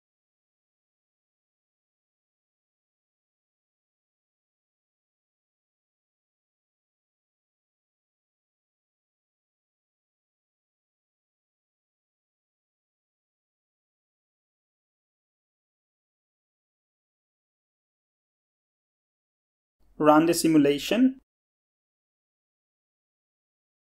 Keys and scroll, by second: 0.0-1.0 typing.